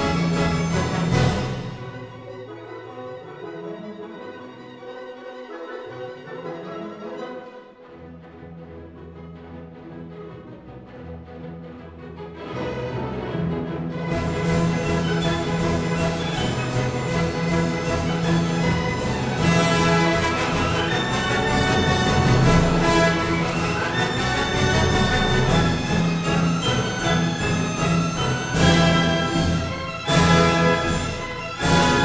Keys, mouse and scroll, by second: 0.2 click, 0.9-2.0 drag, 2.7-3.8 drag, 3.9 Escape, 4.4 s, 5.4 click, 8.0 click, 9.6 ctrl+click, 11.2 click, 12.6 Escape, 14.1 s, 15.3 click, 15.5-16.6 drag, 17.2-18.3 drag, 17.5 Escape, 19.1 click, 20.2 click, 22.3 click, 24.0-25.6 drag, 26.0-27.0 drag, 27.3 click, 28.9 click, 30.3 click.